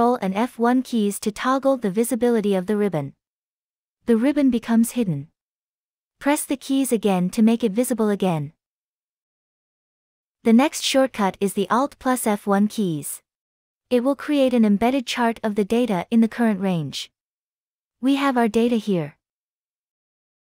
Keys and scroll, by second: 2.7 ctrl+F1, 6.2 ctrl+F1, 8.3 ctrl+F1.